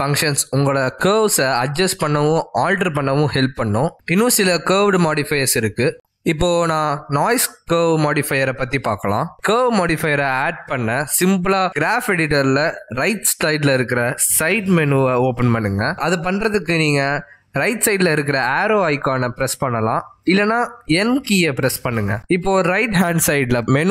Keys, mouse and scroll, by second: 0.8 shift+middle click, 19.4 click, 22.9 n.